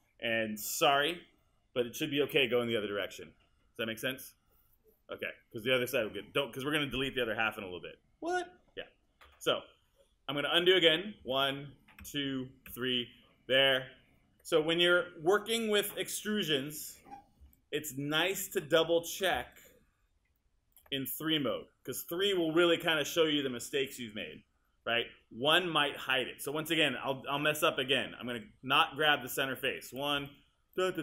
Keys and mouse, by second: 11.2 super+z, 25.2 1, 27.4 click, 28.4 click.